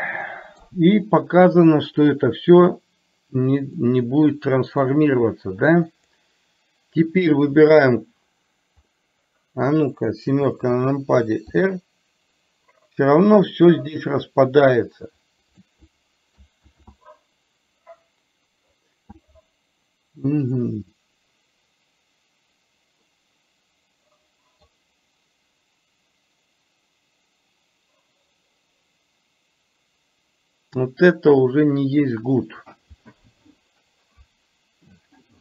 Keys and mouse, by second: 3.8-4.9 middle drag, 5.9 click, 7.8 shift+click, 9.0-9.7 middle drag, 11.5 r, 16.8 ctrl+z, 23.2-24.8 middle drag.